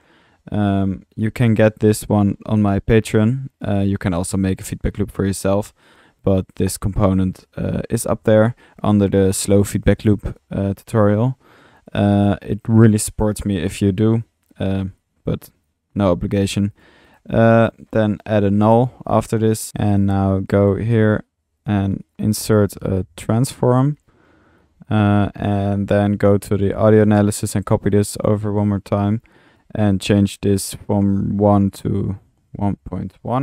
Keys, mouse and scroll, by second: 4.3 click, 5.5 middle click, 10.0 click, 11.2-11.9 middle drag, 11.9 click, 15.0-15.8 drag, 15.2 typing, 16.5-17.2 typing, 16.8 drag, 17.2-17.6 drag, 17.8 drag, 19.4-20.2 typing, 19.6-22.8 middle drag, 22.4-23.3 typing, 27.3-28.3 typing.